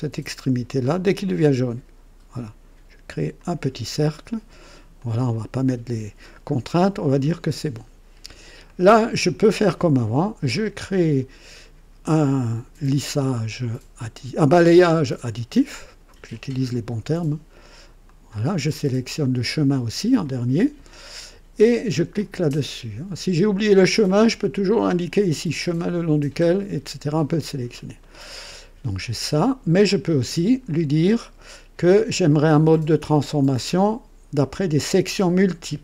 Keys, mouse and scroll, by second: 1.3 click, 3.3 click, 4.9 click, 6.4 scroll up 2, 7.1-8.3 drag, 8.6 right click, 10.5 click, 18.0 ctrl+click, 22.1 click, 32.7 click, 34.8 click.